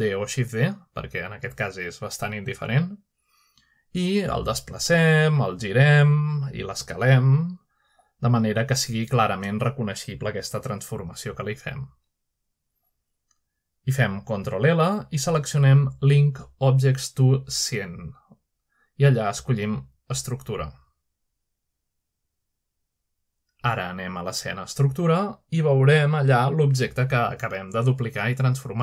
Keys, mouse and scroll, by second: 0.4-0.8 middle drag, 1.1-1.7 middle drag, 2.0 shift+d, 3.0-3.6 drag, 3.8-4.2 middle drag, 4.5-5.6 shift+middle drag, 4.8-6.1 shift+scroll up 1, 6.3 middle click, 6.3 typing, 7.0 click, 7.6 typing, 8.4 middle click, 8.7 typing, 9.1 click, 9.9 typing, 12.2 click, 12.2-14.5 typing, 13.1 click, 13.2 click, 13.8 middle click, 14.9-16.4 drag, 16.4 middle click, 17.0-17.7 typing, 22.0 click, 22.8-23.2 drag, 22.8-24.5 scroll down 1, 23.2-25.3 middle drag, 25.6 click, 27.8-28.5 scroll up 1, 28.2 shift+middle drag, 28.6-28.8 middle drag.